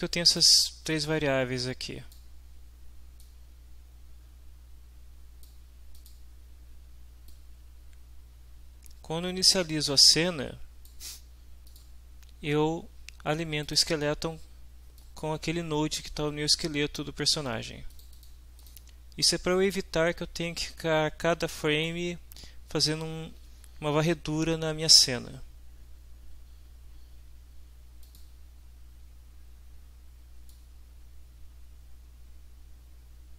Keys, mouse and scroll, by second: 0.3 click, 0.9-2.3 drag, 3.2-5.6 drag, 5.9 click, 7.3-11.0 drag, 11.7 click, 13.7 click, 15.0 click, 17.9 middle click, 18.6 click, 21.9-23.1 drag, 28.0 click, 30.5-33.3 drag.